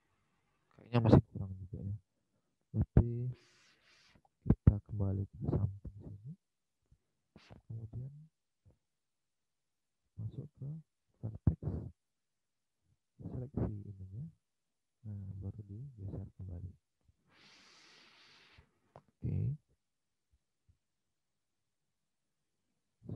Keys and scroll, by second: 21.3 Escape.